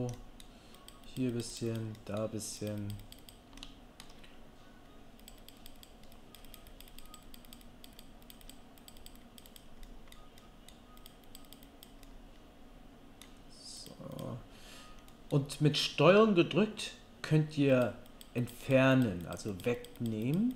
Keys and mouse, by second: 3.7 shift+middle click, 9.8 click, 9.8 middle click, 9.8 right click.